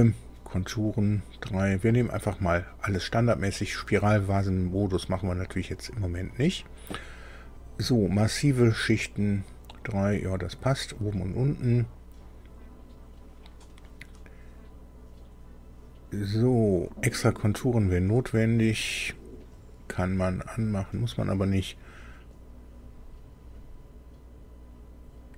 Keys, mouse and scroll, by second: 18.7 click, 19.4 click.